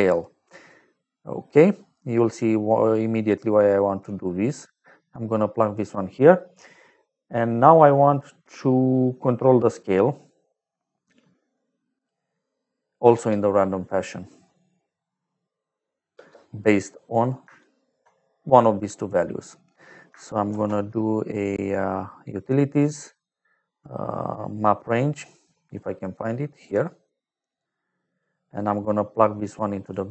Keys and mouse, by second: 1.1 click, 2.0 click, 2.6 middle click, 4.7 click, 11.5 click, 13.1 space, 16.1 space, 16.9 middle click, 17.5 shift+right click, 20.4 shift+a, 25.7 click, 28.1 click.